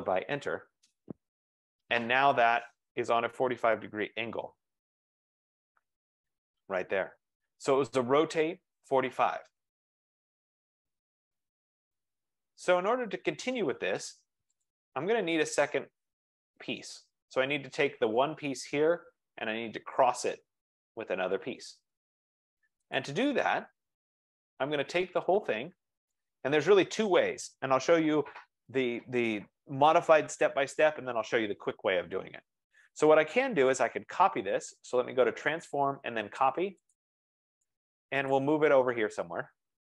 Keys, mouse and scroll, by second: 0.3 Return, 1.7-2.1 scroll up 4, 2.5 scroll, 3.1 right click, 3.2-4.5 scroll, 6.9 right click, 10.7 click, 11.3 scroll, 13.0 right click, 14.9 click, 15.1 F15, 15.8-16.1 scroll, 23.1-24.8 drag, 26.3 click, 30.3-31.5 drag, 35.9 click, 38.5 click.